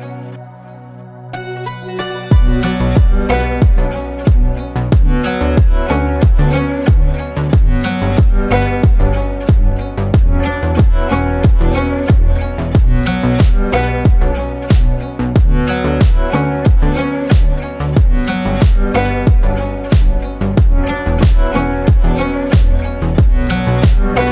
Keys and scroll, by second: 6.0 Escape, 7.0 s, 12.6 Tab, 17.5 Tab, 18.6 KP_7, 19.7 KP_1.